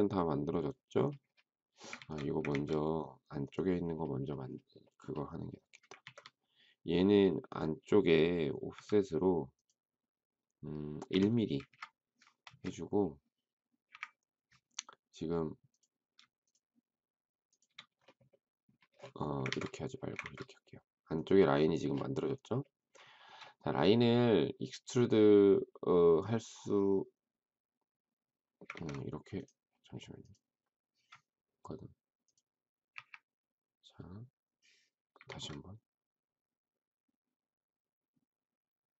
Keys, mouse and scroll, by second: 1.9 ctrl+z, 2.4 ctrl+z, 5.9 ctrl+z, 8.7 f, 10.9 1, 11.6 Return, 12.4 space, 13.8 Delete, 16.4 shift+click, 20.1 ctrl+z, 20.2 ctrl+z, 23.1 shift+middle click, 28.7 ctrl+z, 32.9 Delete, 35.1 ctrl+z.